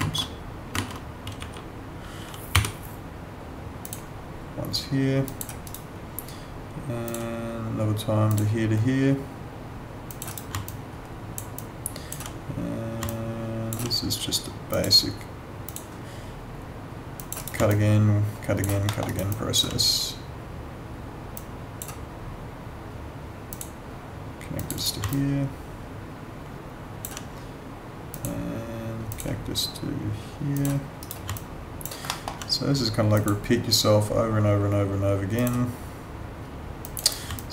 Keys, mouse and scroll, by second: 0.0 ctrl+z, 1.4 w, 2.5 y, 3.8 click, 5.7 right click, 7.0 click, 10.3 right click, 10.7 alt+click, 13.1 alt+click, 17.4 right click, 17.7 alt+click, 18.9 alt+middle click, 19.1 alt+right click, 19.3 alt+click, 21.3 click, 24.7 right click, 25.1 alt+click, 28.1 click, 31.0 right click, 32.1 alt+middle click, 33.1 click, 37.0 right click, 37.3 alt+click.